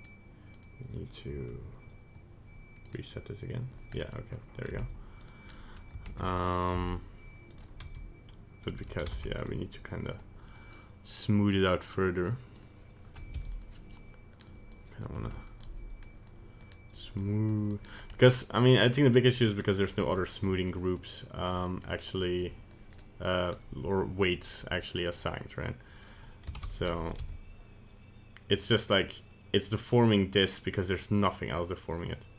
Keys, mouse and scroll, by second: 0.0 click, 0.6 click, 2.9 click, 4.0 middle click, 4.8 Tab, 5.2 right click, 5.5 middle click, 6.1 ctrl+Tab, 6.5 right click, 6.8 Tab, 7.5 right click, 7.8 g, 9.2 ctrl+Tab, 9.4 right click, 10.5 click, 13.4 f, 14.4 click, 14.8 click, 15.2 f, 15.7 click, 16.7 click, 17.3 click, 17.8 click, 18.2 middle click, 18.7 click, 19.3 click, 19.7 click, 20.3 click, 20.8 click, 21.7 click, 22.2 click, 22.8 click, 24.5 click, 26.1 right click, 26.6 ctrl+Tab, 26.7 right click, 27.0 middle click, 27.1 middle click, 27.2 g.